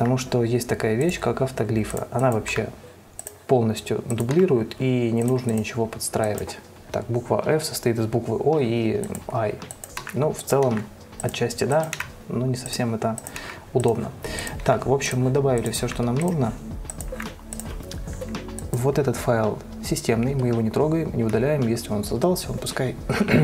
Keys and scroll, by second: 2.9 Delete, 4.7 Delete, 10.4 Delete, 11.0 Delete, 12.3 Delete, 13.8 Delete, 15.0 Delete, 16.2 Delete, 17.5 Delete.